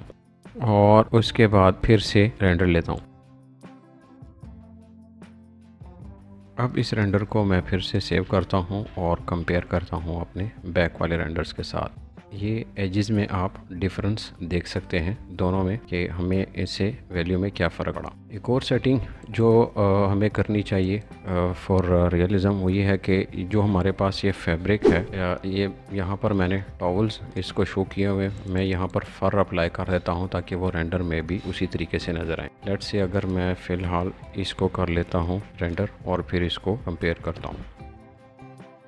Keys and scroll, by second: 24.6 Escape, 25.0 space, 31.7 Escape.